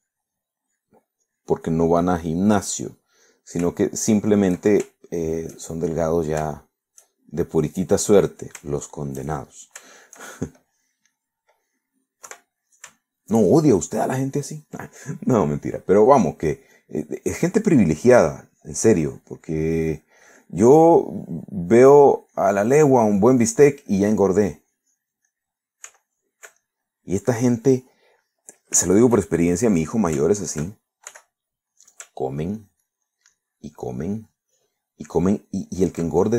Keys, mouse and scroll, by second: 0.9 click, 1.7 click, 2.3 click, 3.0 click, 3.5 middle click, 4.3 middle click, 4.9 shift+middle click, 5.9 shift+middle click, 6.7 shift+middle click, 7.6 shift+middle click, 8.4 shift+middle click, 9.1-10.4 middle drag, 10.9 shift+middle click, 13.3 3, 14.1 shift+middle click, 14.9 shift+middle click, 16.4 middle click, 17.8-21.0 drag, 21.9 middle click, 23.0-26.3 drag, 26.4 middle click, 27.0 Caps_Lock, 27.1 middle click, 27.7 middle click, 28.5 click, 29.9-30.9 shift+drag, 32.2 f, 32.8 click, 33.3-34.4 ctrl+drag, 35.0-36.3 ctrl+drag.